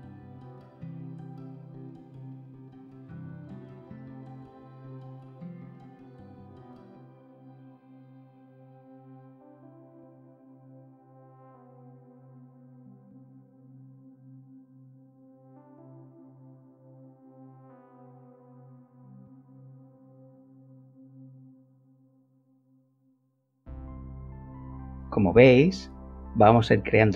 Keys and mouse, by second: 0.4 click, 5.4 click, 5.8 shift+click, 6.7 g, 10.2 click, 11.3 Tab, 17.4 click, 20.3 click, 22.5 click, 25.0 click, 25.5 KP_0, 25.7 Return.